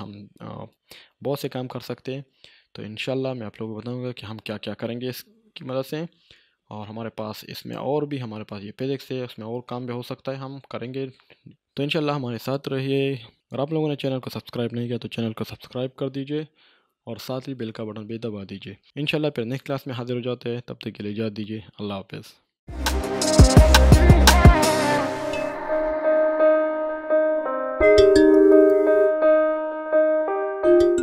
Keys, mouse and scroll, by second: 7.6 click.